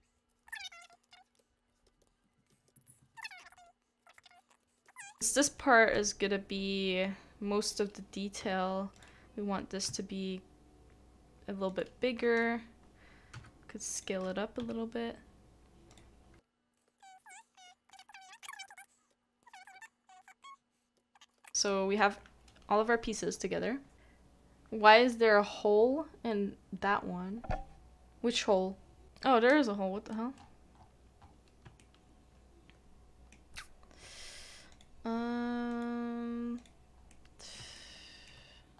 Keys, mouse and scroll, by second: 0.7 double click, 2.3 double click, 2.9 double click, 4.5 typing, 4.5 shift+middle click, 7.2 typing, 14.6 typing, 16.8 typing, 16.9 shift+middle click, 17.7 shift+middle click, 18.5 middle click, 19.4 typing, 19.5 shift+middle click, 21.3 typing, 21.4 shift+middle click, 29.4 scroll, 29.4 scroll up 1, 29.5-29.9 scroll down 1, 30.3-30.7 scroll up 1, 30.7 scroll down 1, 30.8 scroll up 1, 31.8 shift+middle click, 37.1 middle click, 37.7 shift+middle click.